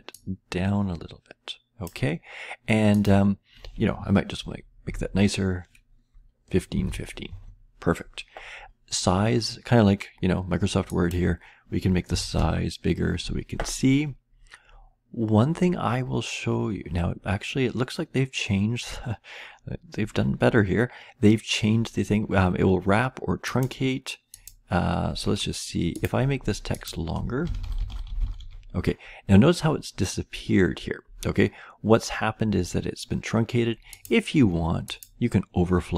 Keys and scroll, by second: 4.1-7.3 typing, 9.9 typing, 11.8-12.5 typing, 27.2-28.8 typing.